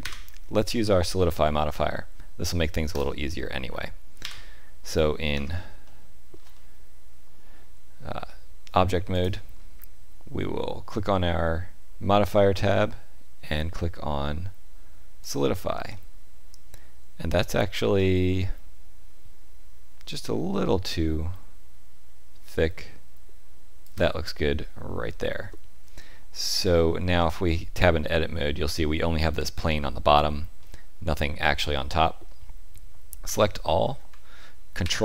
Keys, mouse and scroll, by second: 0.0 Delete, 4.2 KP_7, 5.3 Tab, 5.8 shift+middle click, 6.5 middle click, 9.1 click, 15.9 middle click, 20.0 shift+click, 27.1 Tab, 27.8 middle click, 30.6 middle click, 33.2 a, 34.8 ctrl+KP_7.